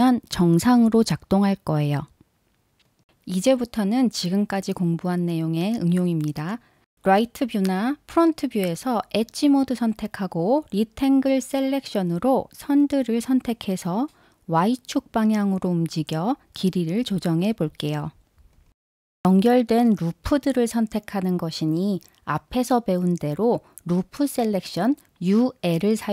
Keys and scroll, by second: 5.4 super+z, 15.8 e, 17.7 0.